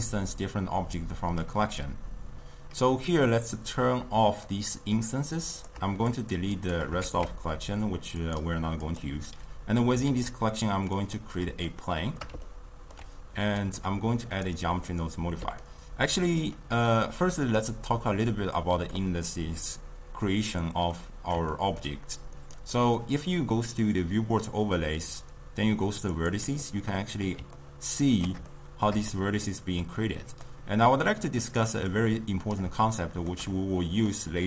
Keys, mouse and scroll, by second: 5.0 click, 6.3 shift+click, 6.8 shift+click, 7.1 shift+x, 8.3-9.1 drag, 11.2 shift+a, 11.8-13.7 shift+middle drag, 13.7 click, 14.5-14.9 drag, 14.9-26.2 middle drag, 26.2-27.6 drag, 27.6-32.1 ctrl+middle drag, 32.1 click, 33.0-34.4 shift+middle drag.